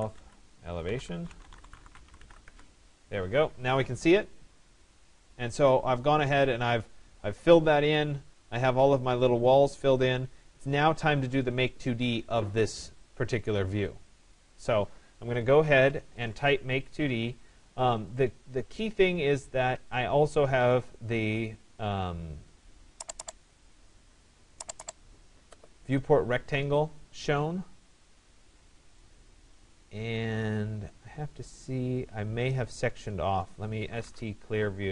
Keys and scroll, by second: 2.1 Return.